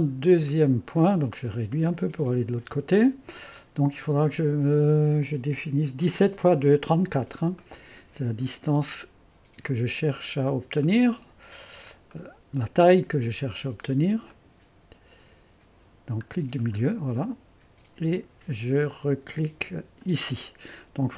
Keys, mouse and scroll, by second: 0.5 click, 1.0 middle click, 1.8-6.9 drag, 7.3-8.0 scroll up 4, 7.6 click, 8.0 click, 10.2-10.7 scroll up 2, 11.0 click, 12.1 click, 13.1 middle click, 15.2 middle click, 15.4-16.5 scroll up 2, 16.6-19.7 middle drag, 20.0-21.1 drag.